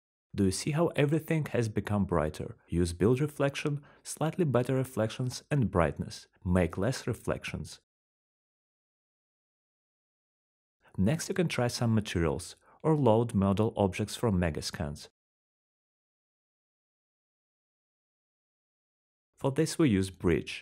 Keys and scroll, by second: 1.7-2.2 typing, 4.5-7.3 typing, 5.5 Return, 10.0-10.7 typing, 10.8 Return, 16.7 g, 17.7-18.6 typing.